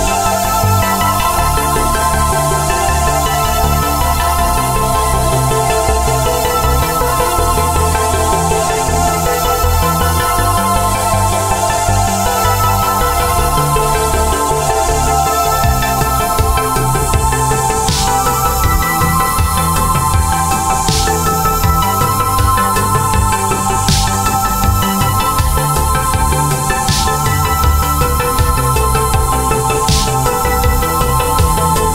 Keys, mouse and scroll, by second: 5.0 right click, 6.1 click, 25.8 alt+scroll up 1, 27.0 alt+click, 27.6 alt+click, 28.7 alt+click, 29.4-29.9 alt+scroll down 2, 30.8-31.9 scroll down 1.